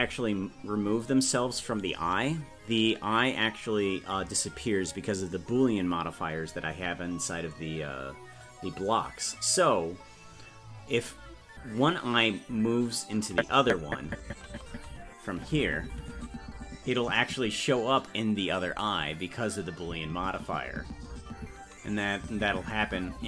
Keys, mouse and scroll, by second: 13.4-23.2 Right.